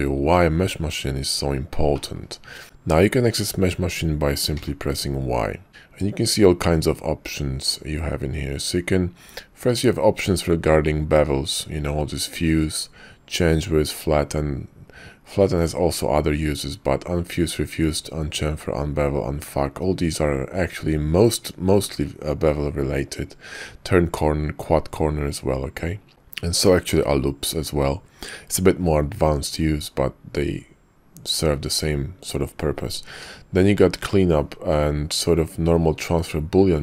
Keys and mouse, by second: 0.3 middle click, 1.9 middle click, 2.6 y, 4.5 y, 33.2 y.